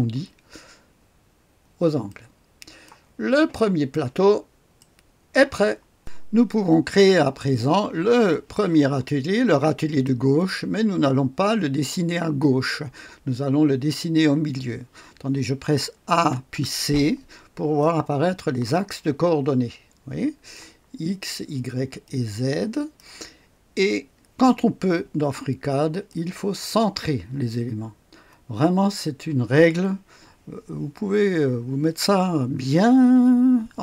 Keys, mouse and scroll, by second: 2.1-3.9 drag, 3.5 right click, 4.2 right click, 4.8 click, 4.8-6.0 right drag, 6.0-7.5 drag, 9.2-10.0 scroll down 1, 10.0-11.2 right drag, 16.1-16.5 typing, 17.8-20.6 drag, 22.0-23.0 drag, 26.1 click, 28.8-31.0 scroll up 1.